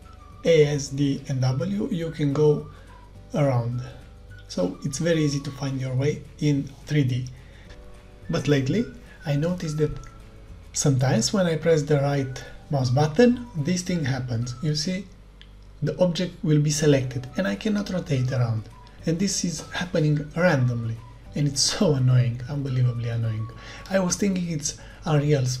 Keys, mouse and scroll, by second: 0.0-1.7 typing, 5.5-9.8 typing, 10.2 right click, 11.3-14.2 typing, 11.4 right click, 11.9 right click, 12.0-15.3 right drag, 15.6 click, 16.4-19.4 typing, 16.4 right click, 16.6-18.3 right drag, 18.5-25.3 right drag, 22.4-25.6 typing, 25.5 right click.